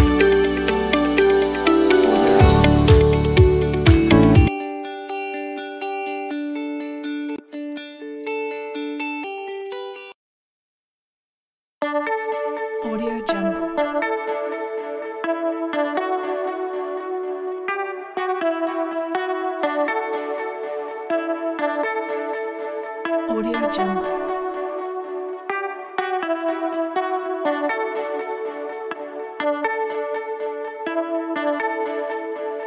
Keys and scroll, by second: 4.2 s, 9.8 s.